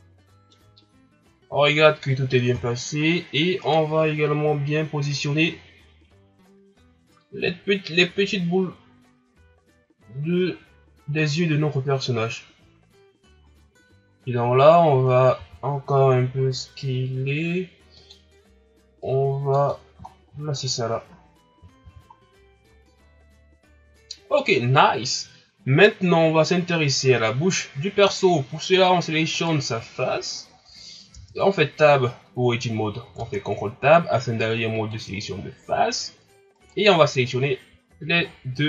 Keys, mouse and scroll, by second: 2.5 KP_1, 3.6 right click, 14.0-14.5 scroll up 2, 15.3 s, 19.0 click, 19.7-20.2 scroll down 7, 20.3 scroll up 2, 21.1 scroll down 3, 21.8 a, 22.9 scroll up 2, 28.2 scroll down 2, 28.7 scroll up 1, 29.3 right click, 30.4 ctrl+scroll down 1, 30.8 scroll up 1, 31.1 Tab, 32.4 scroll down 2, 33.1 ctrl+Tab, 36.5 right click, 37.3-37.9 scroll up 6, 38.2 shift+scroll down 1.